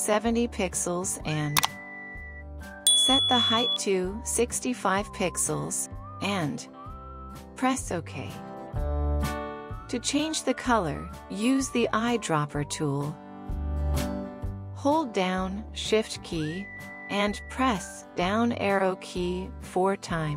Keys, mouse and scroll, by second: 1.2-1.8 typing, 2.7 Tab, 3.2-4.5 typing, 5.0 Tab, 5.8 typing, 17.8 typing.